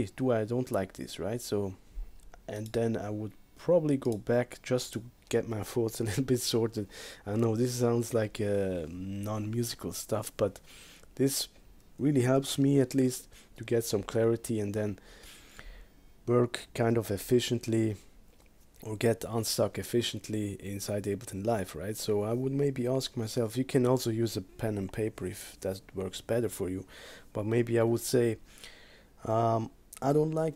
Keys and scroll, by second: 12.2 -, 13.1 Return.